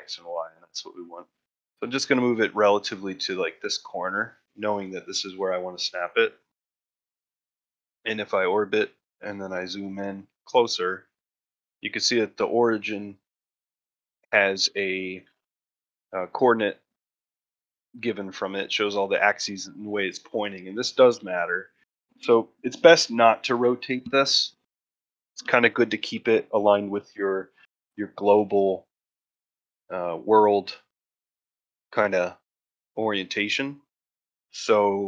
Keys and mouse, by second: 6.3-6.8 middle drag, 7.0 shift+middle drag, 8.0 middle drag, 8.5 shift+middle click, 9.3-10.6 ctrl+middle drag, 11.0 shift+middle drag, 11.5-12.0 ctrl+middle drag, 12.2 shift+middle drag, 12.7 ctrl+middle drag, 13.1 middle click, 14.1-14.6 shift+middle drag.